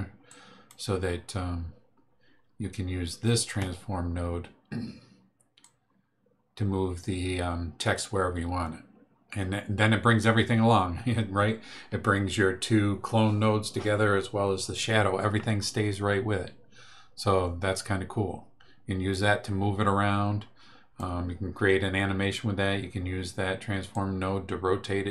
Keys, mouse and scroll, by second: 0.3 ctrl+click, 5.6-21.1 drag, 23.9-25.1 drag.